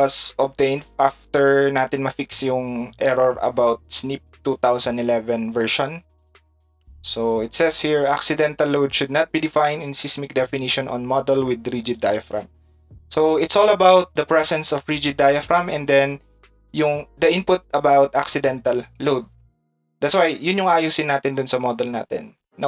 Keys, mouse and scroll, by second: 0.0-1.8 drag, 0.6-1.8 right drag, 7.9 click, 11.8 click, 12.0 click, 14.0 click, 17.3-18.4 drag, 18.1 right click.